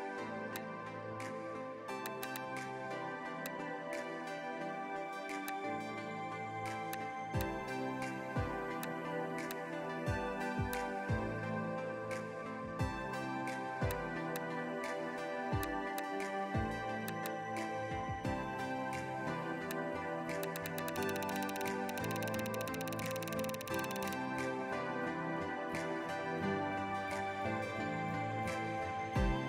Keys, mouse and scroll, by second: 1.4-1.9 [, 2.1 double click, 4.3 ctrl+b, 11.3-11.8 scroll down 1, 17.2 double click, 18.8 ctrl+z, 20.4 double click, 24.5 scroll down 1, 25.9-27.3 scroll up 1.